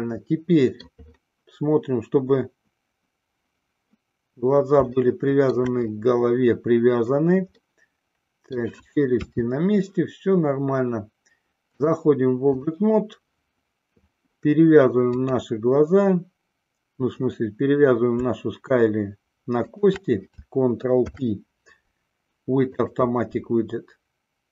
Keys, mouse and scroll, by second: 5.2 shift+middle click, 8.0-9.0 middle drag, 9.6 KP_3, 11.8-13.2 drag, 21.2 ctrl+p.